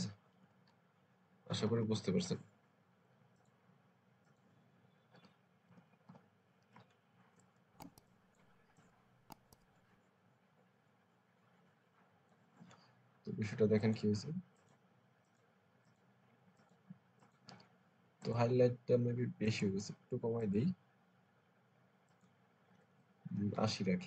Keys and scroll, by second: 0.2-2.4 typing, 5.1 [, 5.5 ], 5.7 ], 5.9 ], 7.2 space, 23.3 Up, 23.4 Up, 23.9 Up.